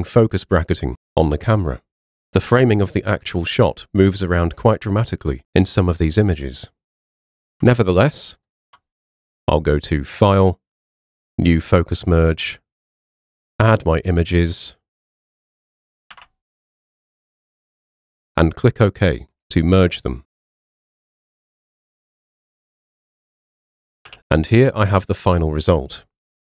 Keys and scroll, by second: 1.4 Down, 3.3 Down, 7.3 space, 7.6 super+Tab, 8.9 super+Tab, 16.1 super+a, 24.1 h.